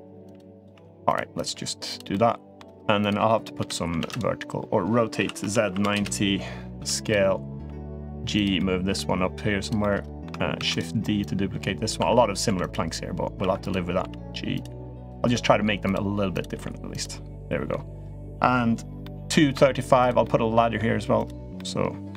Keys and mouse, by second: 0.0-1.3 typing, 0.3 click, 1.1 click, 1.9-2.3 middle drag, 3.3 l, 3.7 shift+d, 4.9 r, 6.5 s, 7.4 g, 8.3 middle click, 8.8 g, 9.6 middle click, 10.4 shift+d, 11.0 click, 11.8 1, 12.3 2, 12.4 click, 13.2 1, 13.4 click, 13.7 g, 14.8 click, 15.1 g, 16.1 click, 16.3 g, 17.1 middle click, 18.8 middle click, 19.3 3, 19.8 click, 20.0-20.5 middle drag, 20.9 click, 21.3 middle click.